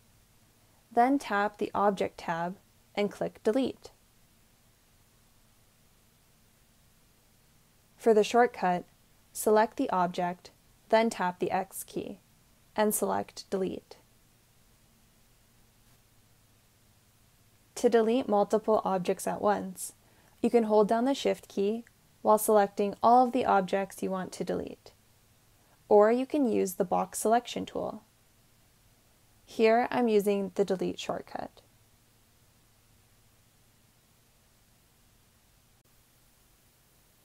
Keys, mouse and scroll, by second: 11.5 x.